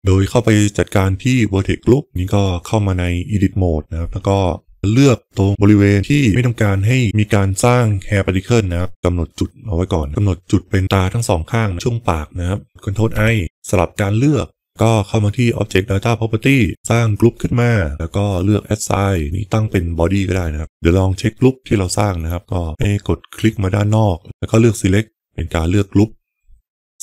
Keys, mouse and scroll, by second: 1.4 Tab, 2.1 click, 4.8 b, 5.5 c, 13.0 ctrl+i, 18.9 click, 19.3-20.6 drag, 22.0 click, 23.3 click.